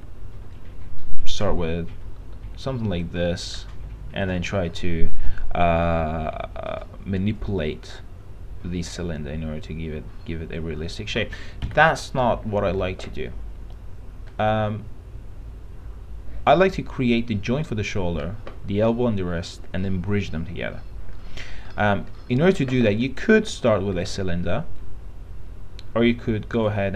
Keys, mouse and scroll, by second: 0.1 e, 0.7-4.9 drag, 5.3 w, 11.9 Delete, 21.5 middle click, 21.9-22.4 scroll up 1, 22.4 middle click, 24.3-26.7 drag.